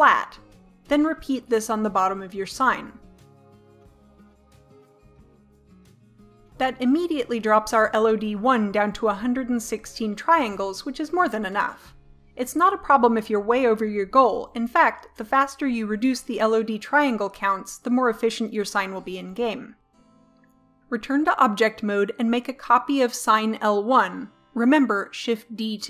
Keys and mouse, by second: 0.2 click, 1.0 click, 1.7 middle click, 2.8 Delete, 2.8 middle click, 4.0 middle click, 4.4 right click, 5.1 click, 6.1 middle click, 7.9-20.6 middle drag, 20.8 middle click, 23.9 shift+d.